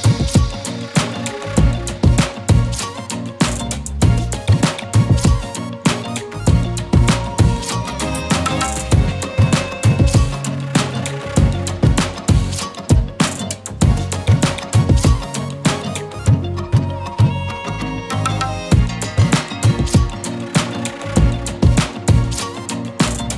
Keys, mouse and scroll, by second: 0.9 right click, 2.8 click, 5.1-7.2 typing, 8.3 click, 9.5 space, 9.6-10.0 click, 10.0 scroll down 1, 11.7 click, 16.5 Return, 18.3 click, 18.5 space, 18.6-19.2 click, 19.0 space, 19.7-20.6 click, 21.5-23.3 shift+click.